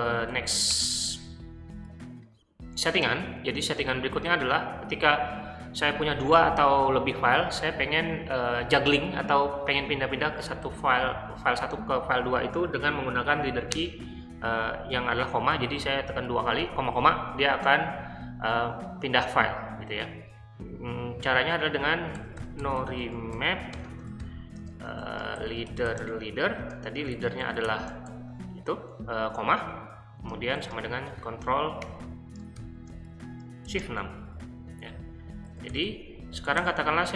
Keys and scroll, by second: 0.0-0.9 typing, 21.9-24.9 typing, 26.8-28.5 typing, 30.2-32.6 typing, 33.7 >, 35.5-37.1 typing.